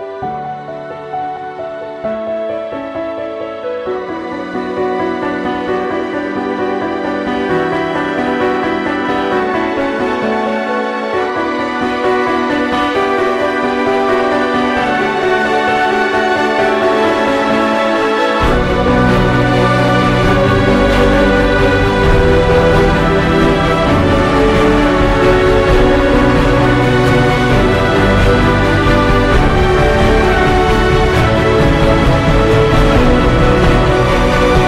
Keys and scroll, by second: 0.7 ctrl+g, 1.0-1.9 typing, 3.6 ctrl+i, 5.1 space, 6.4 ctrl+z, 7.3 ], 7.7 [, 10.6 ], 10.8 [, 13.1 Right, 13.2 BackSpace, 13.3 g, 13.5 Return, 18.8 ctrl+0, 20.2 ctrl+z, 20.5-23.3 typing, 27.4 Return, 27.5 ctrl+t.